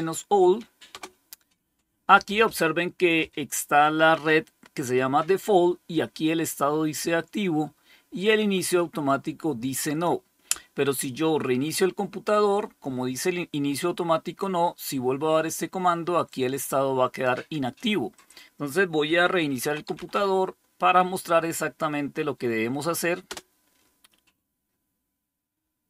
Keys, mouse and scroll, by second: 0.8 Return, 8.9-10.0 drag, 16.1-17.7 drag, 18.1 click, 19.2-20.5 typing, 23.1 Return.